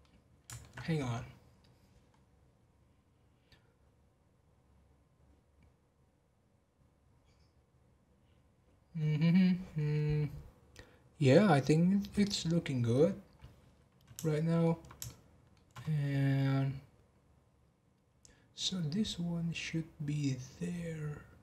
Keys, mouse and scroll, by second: 0.0 middle click, 0.7-1.2 scroll up 10, 2.1-2.5 scroll down 2, 5.6 scroll down 2, 13.3 scroll up 1, 14.3-18.2 shift+middle drag.